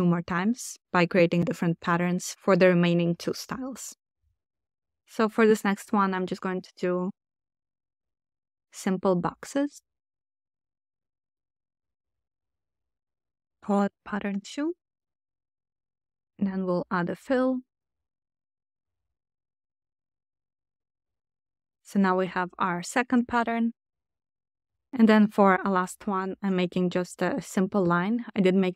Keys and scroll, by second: 6.0 super+c, 6.2 super+v, 8.1 0, 8.5 Return, 12.4 super+r, 12.5-14.2 typing, 18.3 1, 18.6 Return.